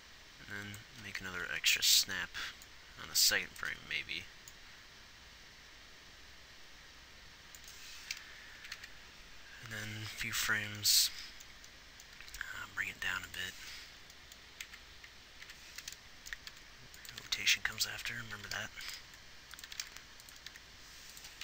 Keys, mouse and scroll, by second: 8.9 Right, 9.1 Right, 12.5 g, 15.1 Right, 15.8 Right, 16.8 r, 17.6 r, 18.7 r, 20.9 r.